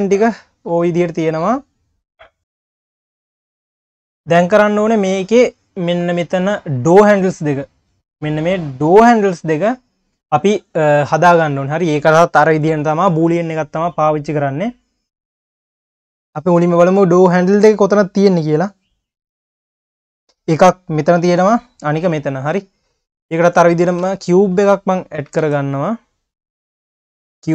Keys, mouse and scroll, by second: 0.9-1.6 scroll up 2, 2.4 scroll down 1, 3.8 scroll up 2, 14.9 click, 17.9 click, 19.0 click, 19.9-20.9 scroll up 3, 21.1 scroll down 1, 22.1 middle click, 22.8-23.2 scroll down 10, 23.2 click, 24.0 a, 24.7 click, 25.4 shift+a, 27.2 scroll up 1.